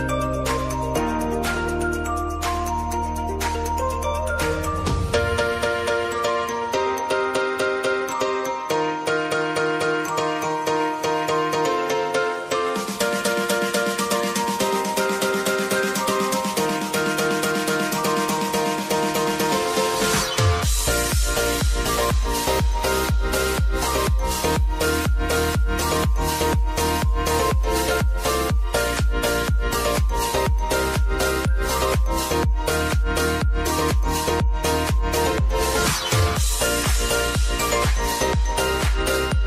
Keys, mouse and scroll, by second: 1.5 ctrl+d, 2.2 click, 2.6 click, 3.7 ctrl+a, 4.3 shift+t, 6.7-9.1 drag, 9.7 ctrl+k, 10.5 t, 11.0 Return, 12.5 click, 13.1 ctrl+d, 13.6 click, 16.3 ctrl+a, 17.0 shift+o, 18.4-21.9 drag, 24.3-28.9 drag, 29.5 ctrl+k, 30.0 shift+o, 30.7 Return, 32.9 click, 34.5 ctrl+d, 35.8 click, 37.8 ctrl+k.